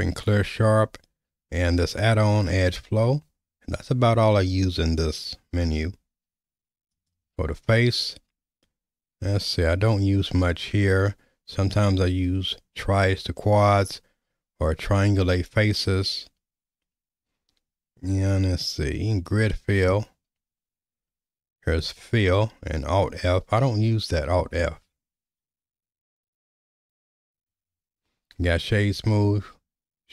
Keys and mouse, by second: 6.9-30.1 drag.